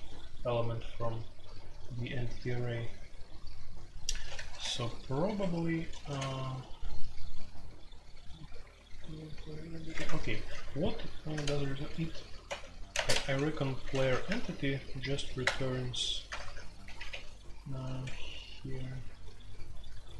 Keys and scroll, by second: 1.4 typing, 4.4 a, 5.4 Escape, 6.0 a, 9.9 Escape, 10.0-14.2 typing, 15.4 Return, 16.0-16.7 typing, 18.0 Escape.